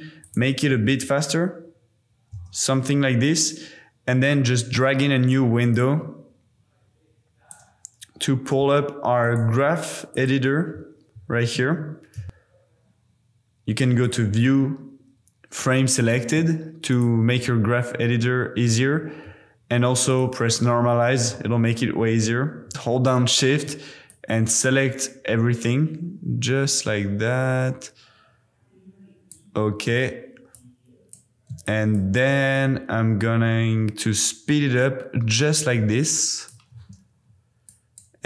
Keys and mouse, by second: 0.2 click, 0.8 space, 2.3 space, 5.0 click, 5.7 click, 6.3 click, 6.5 click, 7.4 click, 8.5 n, 9.3-10.3 drag, 11.2 a, 12.1 a, 14.2-17.0 drag, 18.9 n, 20.0 click, 21.1 a, 21.3 KP_Decimal, 24.0 click, 30.7 click, 31.7-32.0 shift+drag, 32.5 click, 37.7 click.